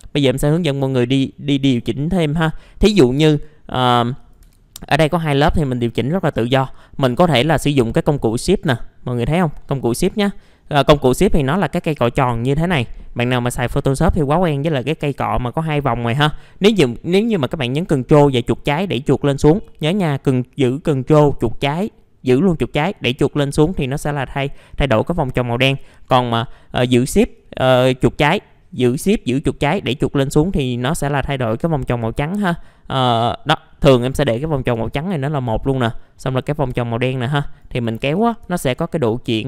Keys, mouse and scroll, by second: 1.6 F4, 4.2 click, 4.5 F4, 6.8 middle click, 8.1 click, 18.2-24.1 ctrl+drag, 27.4-34.6 shift+drag, 36.3 click, 38.0 ctrl+z.